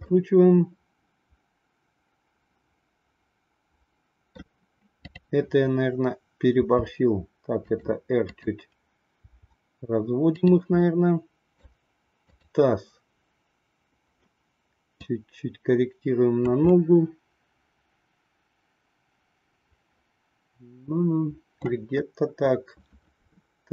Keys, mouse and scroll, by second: 0.1-4.4 middle drag, 5.0-6.4 drag, 6.7 r, 8.2-9.4 drag, 10.8 middle click, 12.3-13.7 drag, 14.9-16.4 drag, 16.8 scroll up 1, 16.9-21.6 middle drag.